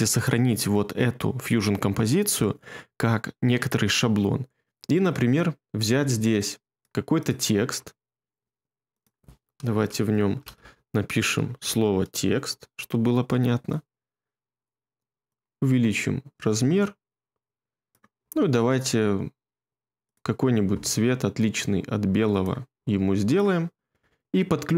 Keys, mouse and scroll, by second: 7.8 1, 10.3-11.6 typing.